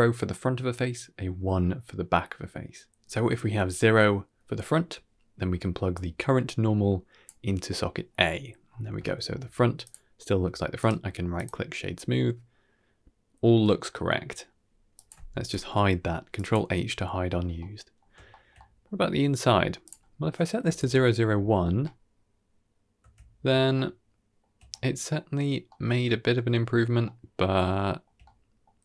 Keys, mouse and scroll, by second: 2.1 middle click, 4.5 middle drag, 5.8-7.2 drag, 8.2 middle click, 8.5-8.8 scroll up 3, 8.9 shift+middle drag, 9.7 click, 10.6 right click, 12.1-13.5 middle drag, 14.8 click, 15.4 ctrl+h, 16.2 click, 17.5-17.8 middle drag, 17.9-18.2 scroll down 3, 18.2 shift+middle drag, 18.5 middle click, 19.7-20.7 drag, 21.7-23.3 middle drag, 23.6-24.3 shift+middle drag, 24.6 middle click, 25.0-25.6 middle drag, 25.3-25.9 scroll down 2, 25.9 shift+middle drag, 26.6-26.9 shift+middle drag, 27.4-27.9 shift+middle drag, 28.1-28.5 middle drag.